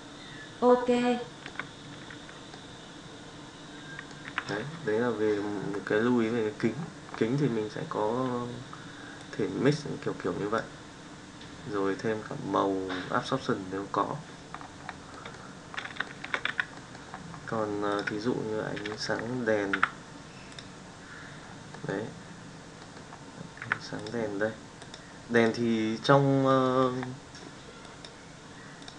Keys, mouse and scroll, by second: 2.4-4.0 middle drag, 4.2 z, 15.1 middle click, 16.4 z, 16.6-17.0 middle drag, 19.0 middle click, 19.8 h, 21.7 middle click, 22.7 middle click, 23.7 h, 23.9 click, 24.8 click, 25.3 click.